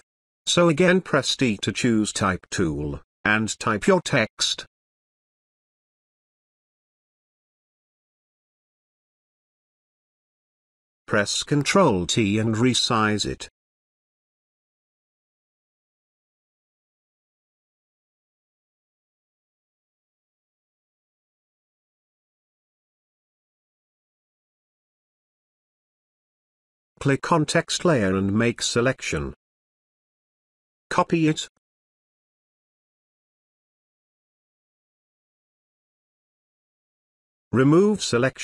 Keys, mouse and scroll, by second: 0.5 t, 1.5 click, 5.2-7.7 typing, 9.1 click, 10.1 t, 11.2-12.8 alt+shift+drag, 16.2-17.4 alt+shift+drag, 17.8 Return, 19.3 t, 19.6 click, 20.0 space, 22.7-26.7 drag.